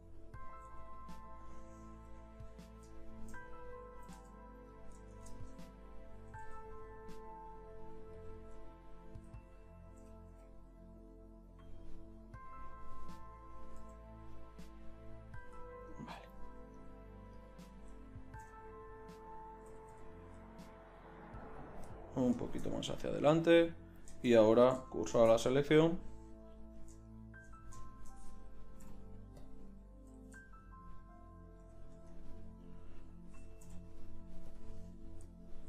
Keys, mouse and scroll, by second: 0.7 g, 2.5 KP_3, 4.1 e, 5.1 shift+Tab, 6.3 e, 10.1 e, 12.3-13.6 drag, 13.9 g, 18.5 KP_3, 19.7 e, 25.1 shift+s, 28.8 ., 30.1 r, 31.9 Tab, 33.6 m.